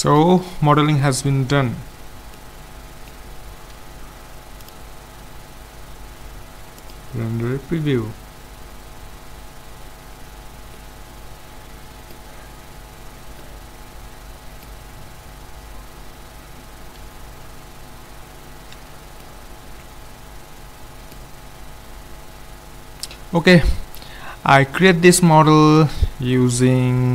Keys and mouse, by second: 1.6-4.2 middle drag, 4.7-6.4 drag, 11.0-12.3 middle drag, 12.8 middle click, 14.2-15.4 middle drag, 16.8-18.8 middle drag, 18.9 shift+z, 19.2 middle click, 20.4-22.1 middle drag.